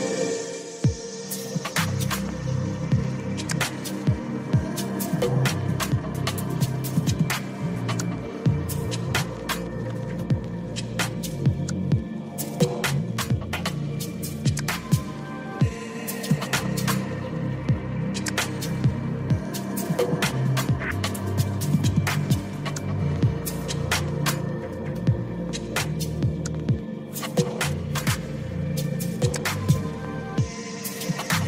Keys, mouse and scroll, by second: 4.3 click, 6.4 click, 7.3 click, 8.3 click, 9.5 right click, 11.2 click, 11.7-13.7 right drag, 13.7 click, 17.9 click, 23.4 click, 28.8 click, 29.2 click, 30.3 click.